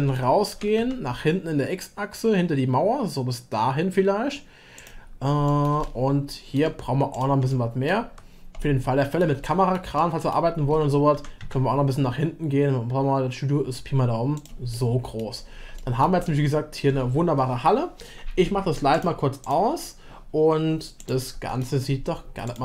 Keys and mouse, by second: 0.5 g, 5.6 middle click, 5.9-6.7 shift+middle drag, 7.1 click, 7.5-7.9 middle drag, 8.6-9.2 middle drag, 9.4-10.3 shift+middle drag, 11.1 g, 14.8 middle click, 15.7 middle click, 16.2 shift+middle click, 18.9-20.8 drag, 21.5-22.5 middle drag, 22.5-22.6 drag.